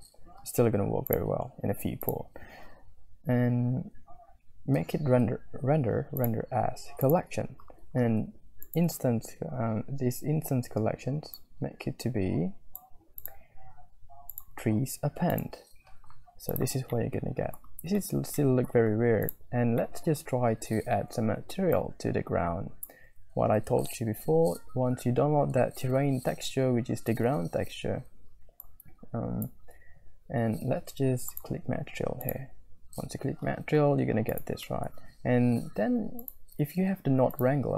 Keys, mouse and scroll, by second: 1.1 click, 2.5-5.0 drag, 6.3-7.4 drag, 8.6 click, 11.3-12.7 drag, 13.3 click, 15.7 click, 16.5 click, 17.0 middle click, 17.1 click, 17.2 middle click, 17.3 click, 18.0 shift+middle click, 18.4-19.3 scroll up 3, 18.4 click, 20.0 middle click, 20.1 scroll up 1, 21.7 scroll up 1, 21.8 click, 22.3 click, 22.5 click, 24.2 shift+F3, 24.7 shift+F3, 25.0 shift+F3, 25.7 shift+F3, 26.5 shift+F3, 27.6 n, 28.6 click, 32.6 click, 34.2 drag, 34.6 middle click, 34.9-36.2 scroll up 1, 36.2-37.7 drag.